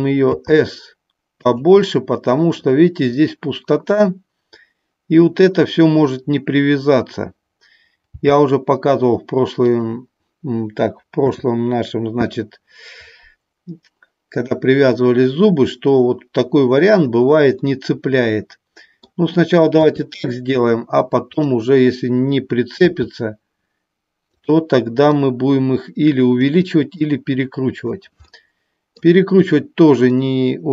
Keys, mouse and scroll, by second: 1.5 click, 9.8 click, 11.2 KP_7, 19.8 KP_3, 21.3 click, 24.3 click, 25.2-26.4 drag, 26.8 click.